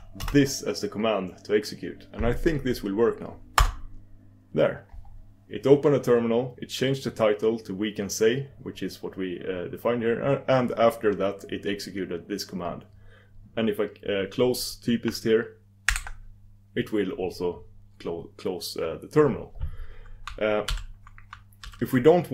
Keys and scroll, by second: 6.6 ctrl+super+Return.